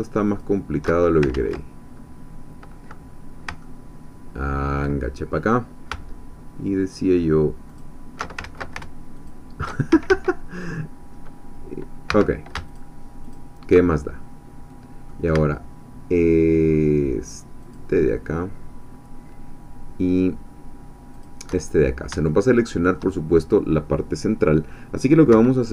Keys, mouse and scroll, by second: 0.3 alt+shift+click, 1.3 ctrl+z, 1.9-3.2 ctrl+scroll up 2, 3.2 scroll down 2, 3.6-4.9 ctrl+drag, 7.8 alt+shift+click, 8.4 ctrl+alt+shift+z, 9.3 alt+shift+click, 9.9 alt+shift+a, 12.1 1, 12.7 alt+shift+click, 13.2 alt+shift+click, 14.0-15.3 alt+shift+middle drag, 17.6 alt+shift+click, 21.2 alt+shift+click, 21.7-22.0 scroll down 2, 22.3 shift+middle click, 25.3 1.